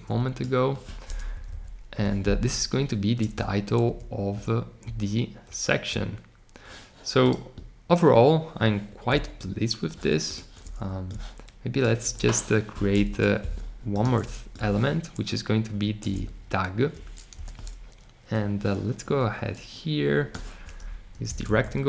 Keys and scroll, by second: 17.3 r.